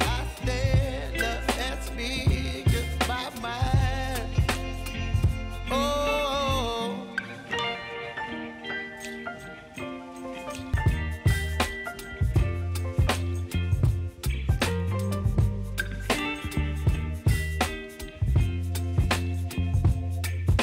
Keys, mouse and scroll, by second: 1.5 k, 2.5-4.7 typing, 7.3 click, 10.8 click, 12.0 F9, 12.7-16.2 drag, 16.2 right click, 17.1 click, 19.6 space.